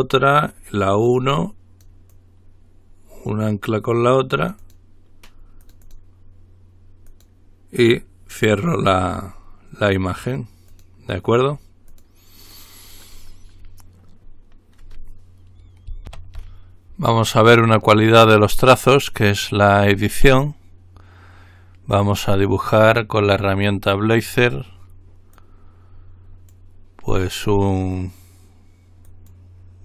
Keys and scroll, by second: 16.3 ctrl+r.